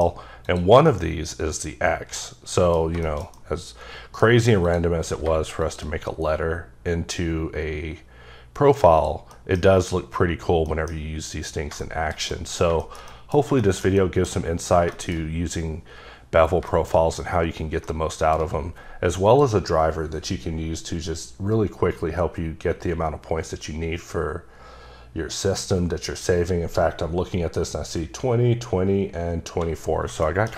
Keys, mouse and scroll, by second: 0.4 click, 0.9 middle click, 2.8 scroll down 2, 3.1 shift+middle click, 4.3-4.6 scroll up 3, 4.6 click, 5.0 q, 5.6 shift+click, 6.3-7.0 scroll down 4, 7.5 scroll up 2, 7.9-9.0 scroll down 2, 9.0 click, 9.3 middle click, 9.6 scroll down 1, 10.5 scroll down 2, 10.7 middle click, 11.8 double middle click, 12.3 middle click, 12.8 shift+middle click, 13.4 scroll down 2, 13.6 shift+middle click, 15.2-16.5 scroll up 2, 16.5 scroll down 1, 16.7 middle click, 17.9 shift+middle click, 19.3 click, 24.2 click, 24.2-26.1 scroll down 3, 26.9 scroll up 3, 28.8-29.7 scroll down 3, 30.1-30.5 scroll up 4, 30.2 middle click.